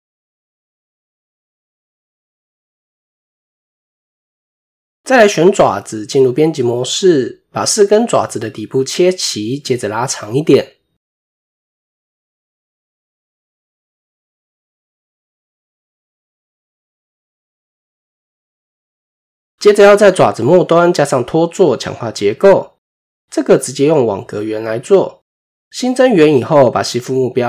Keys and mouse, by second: 0.4 KP_1, 2.7 click, 5.2 Tab, 5.7 click, 7.5 s, 9.4-12.2 drag, 14.0 click, 15.3 click, 15.6 Tab, 16.1 middle drag, 16.9 middle click, 17.4 KP_7, 18.2 shift+middle click, 20.9 shift+middle click, 22.4 shift+a, 26.2-27.4 drag.